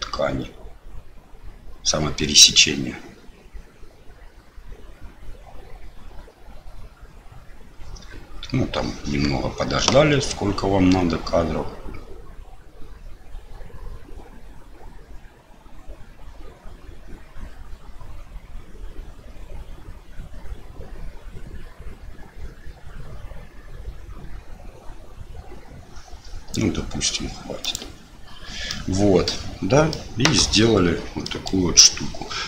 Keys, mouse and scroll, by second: 28.0 click, 28.6 middle click, 29.9 middle click, 31.2 middle click.